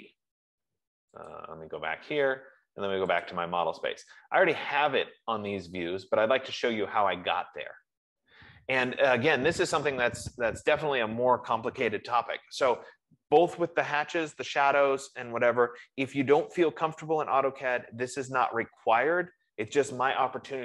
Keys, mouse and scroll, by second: 1.7 click, 3.7 click, 5.3 scroll, 6.8-7.6 scroll, 10.7 middle click.